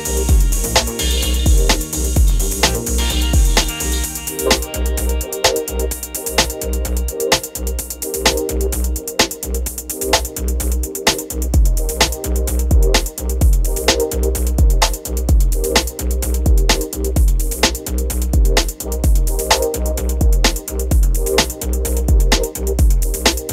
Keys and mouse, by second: 0.0 middle click, 0.2 space, 1.3 space, 1.4 ctrl+s, 1.6 click, 1.9 click, 2.2 ctrl+s, 3.0 ctrl+s, 3.2 click, 3.6 click, 3.8 a, 3.8 x, 4.0 r, 4.0 z, 4.8 click, 5.3-11.2 typing, 6.0 click, 6.9 ctrl+a, 9.9 ctrl+z, 10.5 click, 12.2 right drag, 12.4 space, 12.7 ctrl+s, 12.8 click, 13.2 a, 13.2 x, 13.3-14.5 drag, 14.5 n, 14.9 right click, 15.2 click, 15.9 click, 16.3 click, 16.8 right click, 17.1 space, 17.5 click, 18.2 ctrl+s, 18.4 click, 19.0 drag, 19.4 click, 19.9-23.5 typing.